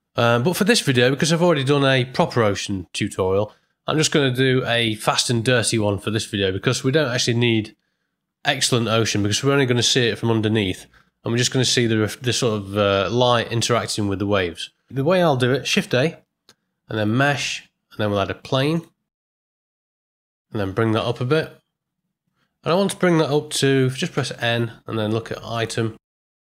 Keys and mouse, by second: 5.9-6.8 middle drag, 15.7 shift+a, 20.9 g, 24.1 n, 25.6 click.